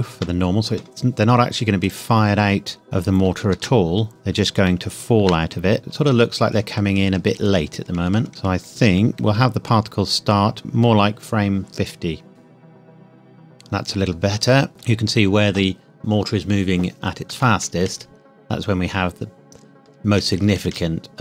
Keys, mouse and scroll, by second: 0.1 KP_Enter, 1.8 click, 2.2-2.9 scroll down 1, 2.9-3.5 scroll up 1, 3.5 space, 4.1 scroll down 1, 4.6 shift+middle click, 5.8 space, 6.0 Left, 12.3 space, 14.7 space, 17.6 Left.